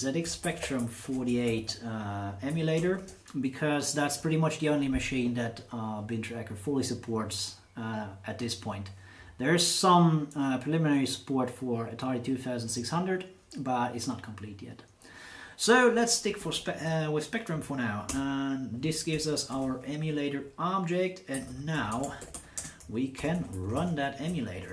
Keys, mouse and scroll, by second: 0.0-2.9 typing, 16.4 shift+9, 16.8 shift+9, 18.1 Return, 19.5 shift+8, 21.1-24.5 typing.